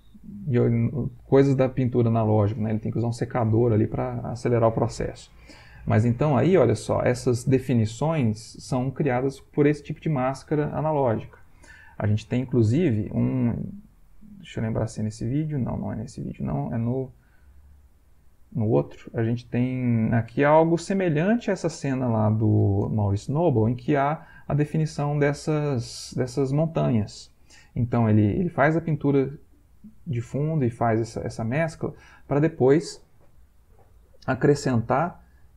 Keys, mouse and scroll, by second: 14.0 click, 15.9 click, 17.9 click, 19.6-21.1 drag, 26.9 Right, 27.6 Right, 30.4 Right.